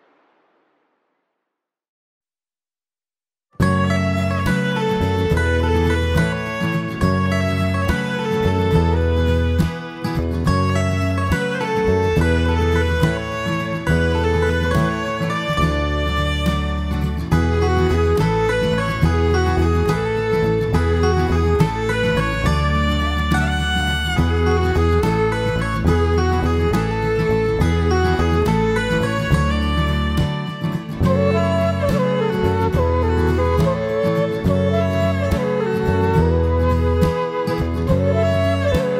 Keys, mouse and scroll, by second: 0.9 click, 3.3 click, 5.5-5.9 scroll down 3, 5.9 middle click, 6.4-7.1 scroll up 7, 7.3 shift+middle click, 8.9 ctrl+z, 9.3 ctrl+z, 9.8 middle click, 11.3 click, 12.8 click, 14.1 ctrl+z, 17.8 shift+f, 19.5 click, 20.9 click, 22.7 click, 23.8 click, 25.3 click, 26.6 click, 28.0 click, 29.8 click, 31.3 click, 36.4 click.